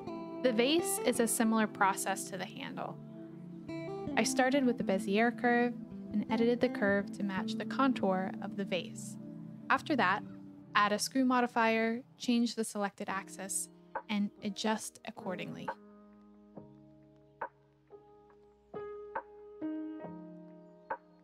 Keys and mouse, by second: 2.8 r, 3.0 y, 3.4 9, 3.5 0, 3.9 Return, 4.8 g, 5.4 z, 6.8-8.1 typing, 7.7 click, 7.9 click, 8.3 shift+click, 8.9 click, 9.1 r, 9.6 middle click, 9.9 Tab, 10.8-12.5 drag, 13.9-15.2 drag, 15.5 click, 17.5 click, 17.5 r, 17.7 click, 18.2 g, 18.3 x, 18.7 click, 18.9 r, 20.2 click, 20.4 s, 20.7 click.